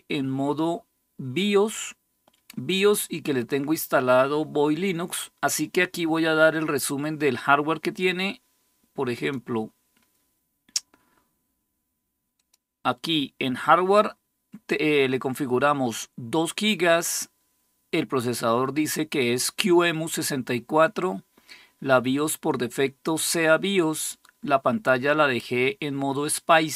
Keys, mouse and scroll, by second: 8.9 click, 12.2 click.